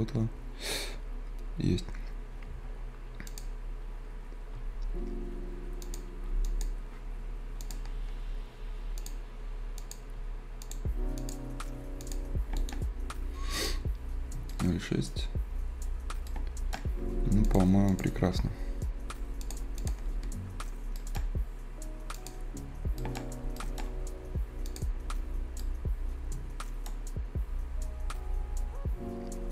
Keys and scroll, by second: 22.6 Escape.